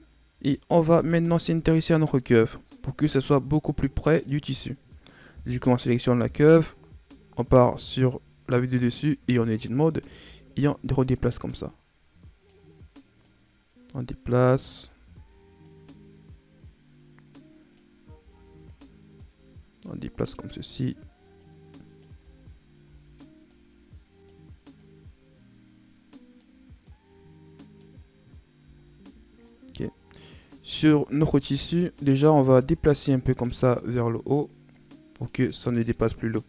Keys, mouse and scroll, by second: 0.0-0.6 scroll down 3, 0.6 Tab, 1.1 scroll down 1, 1.3-2.5 middle drag, 2.5-3.1 scroll up 2, 3.9 right click, 6.1 KP_7, 7.4 Tab, 8.1-8.4 scroll down 2, 8.8 scroll up 5, 9.6-10.5 scroll up 1, 10.5 right click, 13.2 right click, 14.7-15.5 scroll down 5, 15.5 right click, 18.3-19.1 scroll up 2, 19.1 right click, 21.3 right click, 22.1-23.4 scroll down 8, 23.4 right click, 24.7 right click, 26.8 right click, 28.0-28.7 scroll down 2, 28.7-29.3 scroll up 1, 29.4-30.7 middle drag, 30.7-31.1 scroll down 3, 31.1 scroll up 1, 31.4 Tab, 31.9 right click, 32.2 Tab, 33.0 right click, 34.7 right click, 35.5 middle click, 36.3 right click.